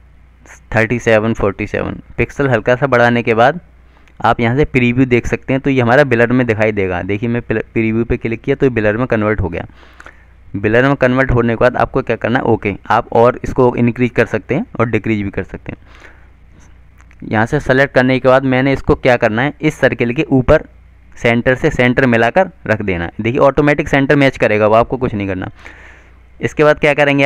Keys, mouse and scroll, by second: 1.4 click, 6.8 click, 14.0 click.